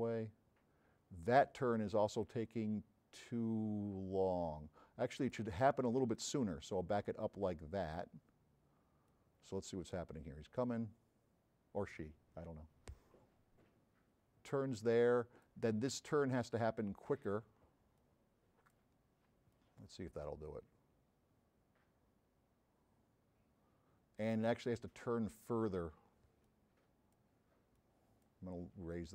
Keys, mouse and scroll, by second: 6.2-8.1 drag, 9.1-15.6 drag, 16.5 click, 18.0 click, 19.6-25.6 drag, 26.5 click, 27.8 click.